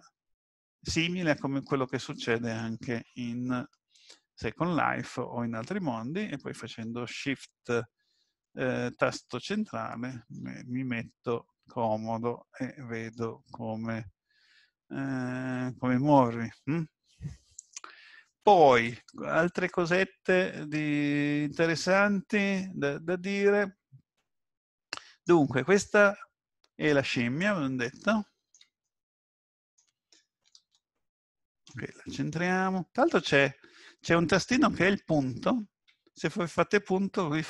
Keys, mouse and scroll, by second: 8.4 shift+middle click, 10.7 middle click, 14.0-15.3 scroll up 6, 15.3-17.0 scroll down 4, 26.1-27.3 scroll up 2, 27.3 scroll up 1, 27.4 middle click, 28.8 middle click, 30.5 shift+middle click, 31.7 shift+middle click, 31.9-32.4 scroll up 3, 33.2-35.2 scroll down 4, 35.9 KP_Decimal.